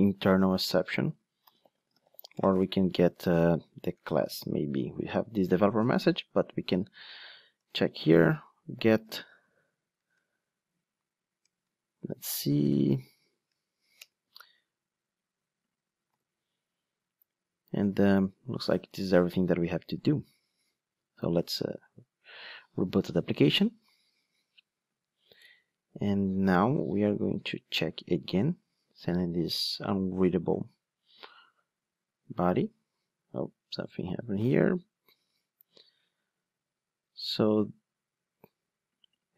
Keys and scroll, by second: 7.6 Return, 20.1 ctrl+d.